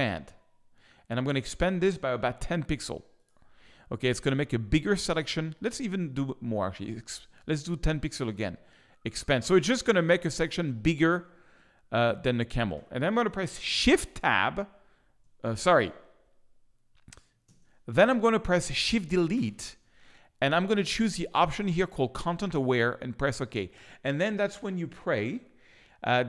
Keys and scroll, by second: 17.4 ctrl+space, 18.0 ctrl+shift+space, 19.3 shift+BackSpace.